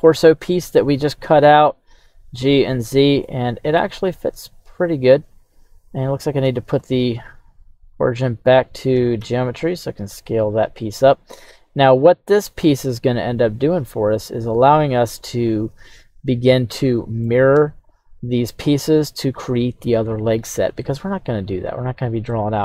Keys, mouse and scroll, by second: 1.3 x, 3.2 click, 4.0 s, 4.3 x, 5.8 right click, 6.6 shift+s, 9.2 s, 9.2 x, 13.7-15.2 drag, 15.2-17.3 middle drag, 17.6 KP_1, 22.3-22.6 middle drag.